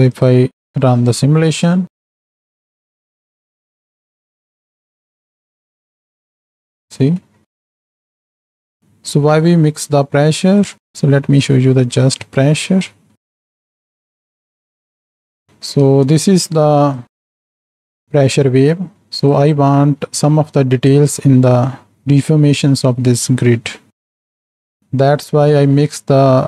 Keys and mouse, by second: 0.1 click, 0.9-1.6 middle drag, 1.8 space, 2.6-3.0 middle drag, 6.8 space, 7.4 middle click, 7.7 click, 8.8-11.4 drag, 12.2 z, 13.1 shift+Right, 13.1 shift+Left, 13.2 space, 16.1 space, 16.9-19.3 drag, 20.1 middle click, 21.6 middle click, 23.1 middle click, 24.2 click.